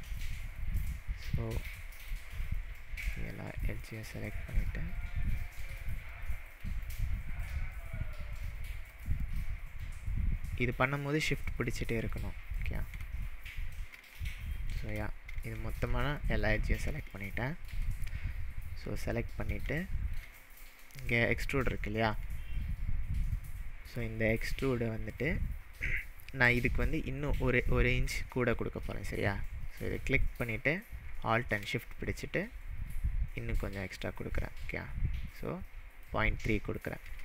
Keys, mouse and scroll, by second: 0.1 shift+click, 0.9-1.4 shift+middle drag, 2.4 shift+click, 2.8-3.3 shift+middle drag, 3.9 shift+click, 4.4-4.9 shift+middle drag, 5.8 shift+click, 6.2-6.7 shift+middle drag, 7.4 shift+click, 7.8-8.3 shift+middle drag, 8.9 shift+drag, 9.3-9.8 shift+middle drag, 11.4 shift+click, 11.7-12.2 shift+middle drag, 12.6 shift+click, 13.0-13.9 shift+scroll down 7, 14.3-14.7 shift+middle drag, 15.0 scroll down 1, 15.6-16.1 shift+middle drag, 19.1-19.5 scroll up 1, 19.6-20.3 shift+middle drag, 26.0-26.8 scroll up 3, 30.0-33.0 drag.